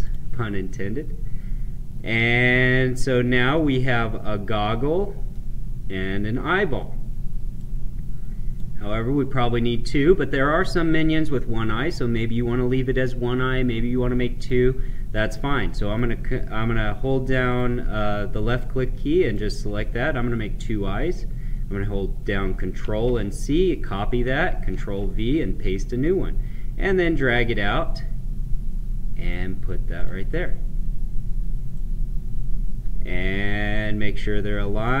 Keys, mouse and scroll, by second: 1.7 scroll up 1, 2.6 middle click, 3.8-4.5 scroll up 1, 4.5-7.5 middle drag, 7.5-11.1 right drag, 14.3-22.7 drag, 22.7 ctrl+c, 24.6 ctrl+v, 25.9-29.8 drag, 31.6-35.0 right drag.